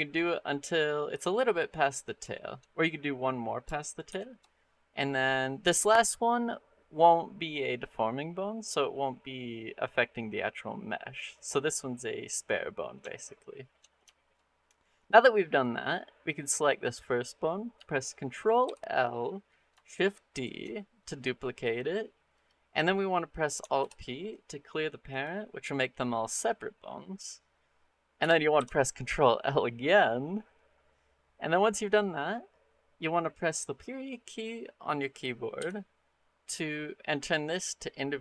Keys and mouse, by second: 2.2 shift+middle click, 3.9 shift+r, 12.9 shift+middle click, 14.0 shift+middle click, 15.5 click, 18.5 ctrl+l, 20.1 shift+d, 23.6 alt+p, 28.4 ctrl+l.